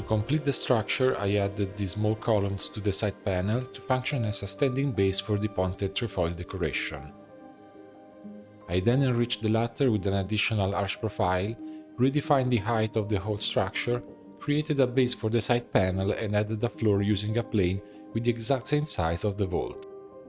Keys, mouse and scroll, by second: 0.0 2, 0.4 alt+click, 0.6-1.0 scroll down 8, 1.0-2.2 middle drag, 2.2 click, 2.5-2.8 scroll down 3, 2.8 shift+middle click, 3.4 e, 5.3-6.8 drag, 7.4 click, 7.9 s, 10.4 alt+s, 11.4 g, 13.9-14.9 middle drag, 14.9 e, 16.1 click, 16.3 click, 16.5 Tab, 16.8 shift+middle click, 17.4 1, 17.7 shift+middle click, 18.0 scroll up 2, 18.3 s, 20.1 click.